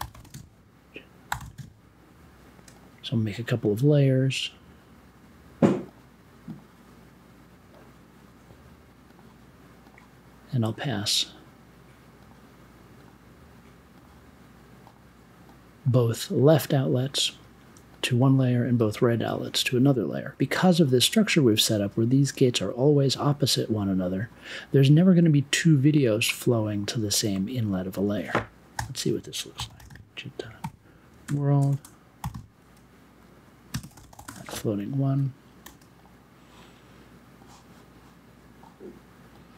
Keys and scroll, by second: 0.0-2.0 typing, 3.4-4.2 typing, 5.4 super+j, 7.8 BackSpace, 28.7-34.8 typing, 35.6 super+j.